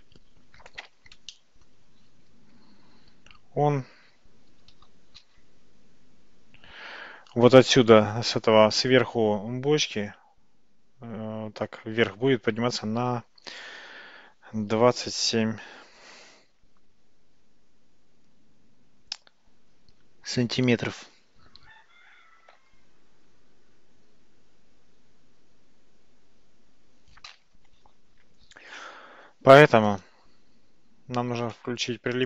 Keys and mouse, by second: 1.4-1.8 shift+middle drag, 2.6 Tab, 4.6 g, 31.4 click.